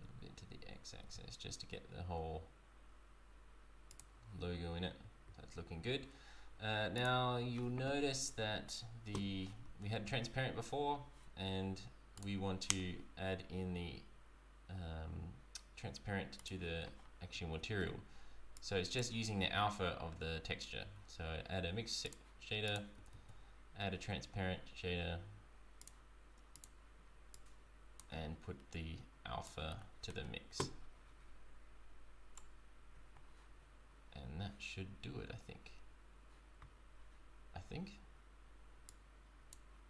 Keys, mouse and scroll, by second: 6.7 z, 6.9 click, 9.6 z, 12.1 click, 18.5 click, 19.4 shift+a, 23.2 shift+a, 27.4 click, 29.4 click, 38.8 click.